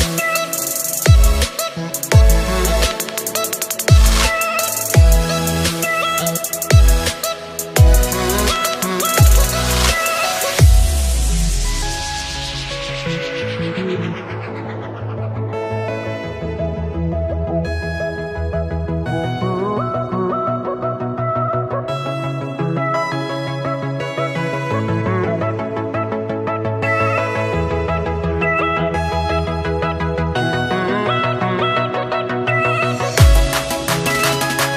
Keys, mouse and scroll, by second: 2.4 r, 8.1 click, 9.5 s, 14.9 r, 18.6 shift+click, 19.4-20.5 shift+middle drag, 20.5 shift+d, 25.1-26.9 shift+middle drag, 26.9-27.6 scroll down 2, 27.8 shift+click, 28.5 shift+click, 29.9 shift+d.